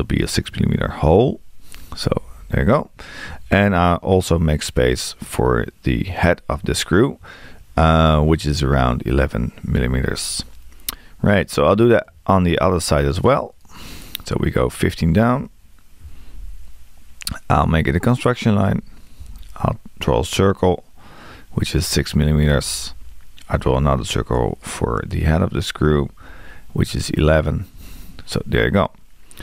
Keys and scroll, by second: 2.1 Return, 8.5 1, 15.1 1, 18.7 x, 21.9 6, 26.9 1.